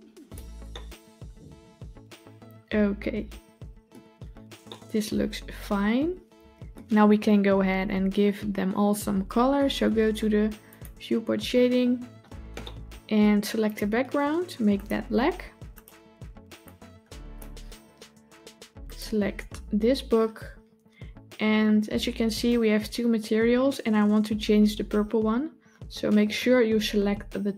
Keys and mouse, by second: 0.6-3.7 middle drag, 4.5-6.6 middle drag, 10.6 click, 12.5-13.0 shift+middle drag, 13.5 click, 15.6 click.